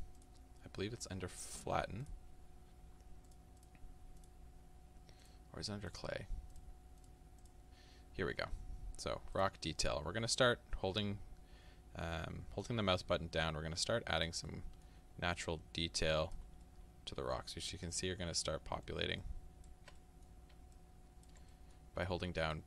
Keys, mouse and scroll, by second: 2.2 click, 3.4-5.5 drag, 7.5-10.4 drag, 10.4-12.8 middle drag, 12.8-14.5 drag, 14.5 middle click, 15.4-16.7 drag, 16.7-19.2 middle drag, 19.2 ctrl+click, 20.0 middle click, 20.8 ctrl+click, 21.5-22.5 middle drag, 22.5 click.